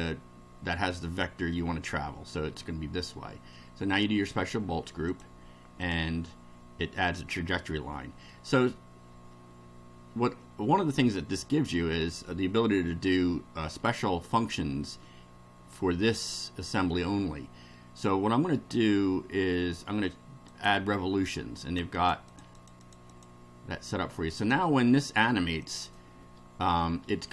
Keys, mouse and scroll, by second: 0.0-1.7 middle drag, 3.9 click, 5.1 click, 5.8 click, 7.7-8.5 middle drag, 20.5 click, 21.6 click, 24.4 click, 25.6 click.